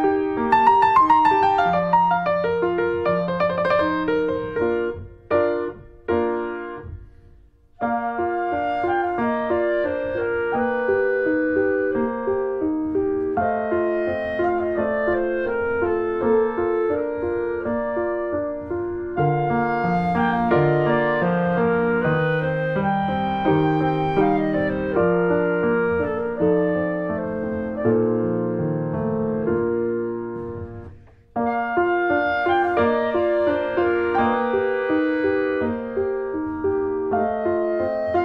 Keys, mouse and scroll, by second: 0.1 middle click, 0.3 Tab, 0.4 click, 0.6 ctrl+s, 0.7 click, 0.9 alt+middle click, 1.3 click, 1.7 middle click, 1.9 Tab, 2.0 click, 2.2 click, 2.4 ctrl+s, 2.6 alt+middle click, 2.7 alt+middle click, 3.1 ctrl+s, 3.5 middle click, 3.8 scroll up 1, 4.1 click, 4.8 `, 5.5 middle click, 5.9 ctrl+s, 6.0 click, 6.1 scroll down 2, 6.8 click, 7.4 h, 7.7 middle click, 8.0 shift+a, 9.7 shift+a, 9.9 alt+middle click, 10.2-10.6 scroll down 1, 10.6 s, 13.2-15.5 alt+middle drag, 15.5 g, 19.1 middle click, 19.9 3, 20.1 click, 20.6 shift+middle click, 21.2 click, 22.1 click, 22.3 shift+middle click, 22.9 click, 23.8 click, 24.7 2, 24.9 click, 25.3 shift+middle click, 25.8 click, 26.6 shift+middle click, 26.8 scroll down 1, 27.0 shift+middle click, 27.8 s, 31.6 middle click, 32.3 click, 33.3 ctrl+r, 34.3 middle click, 34.5 s.